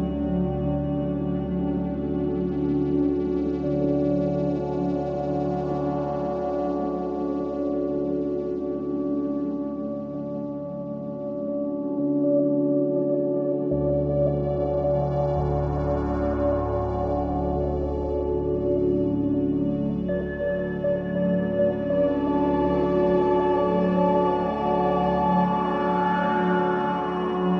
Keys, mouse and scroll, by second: 0.2 r, 4.3 shift+click, 5.8 shift+d, 8.1 click, 10.5 r, 15.4 shift+click, 17.4 shift+d, 20.3 click, 22.6 r.